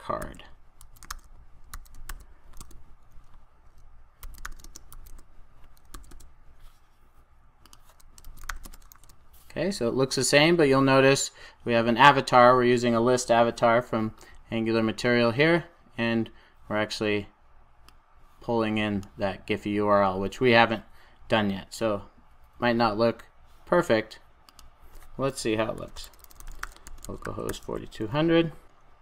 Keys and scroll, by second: 2.0 super+j, 2.5 Return, 8.9 super+s.